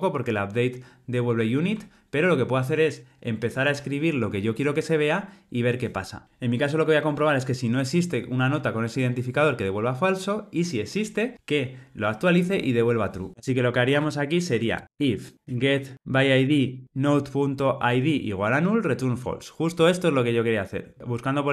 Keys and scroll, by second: 16.4 Return.